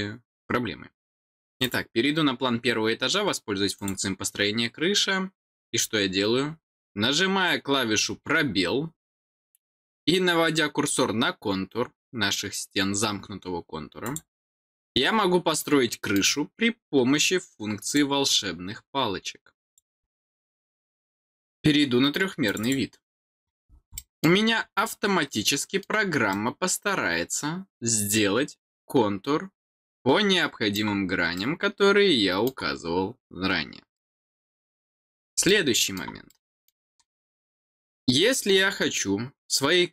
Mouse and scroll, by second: 1.4 click, 3.7 click, 8.4 scroll down 1, 14.0 click, 15.1 scroll down 1, 15.5 middle click, 17.8 click, 19.6 click, 22.4 click, 22.6 click, 23.9 middle click, 24.5 scroll down 1, 24.8 middle click, 26.3-30.7 middle drag, 31.3-32.4 middle drag, 33.9 middle click, 35.1 middle click, 35.4 middle click, 36.2 middle click, 37.2-37.6 scroll down 4, 37.8 middle click, 38.5-38.9 scroll down 4.